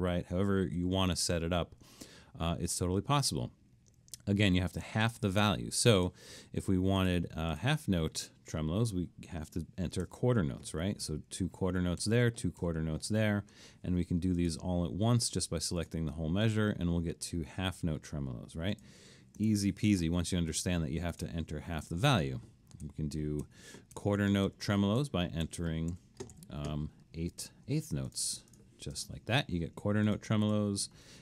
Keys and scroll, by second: 10.1-12.6 typing, 13.5 Escape, 19.4 Delete, 22.9-26.3 typing, 26.9 Escape, 30.5 super+z.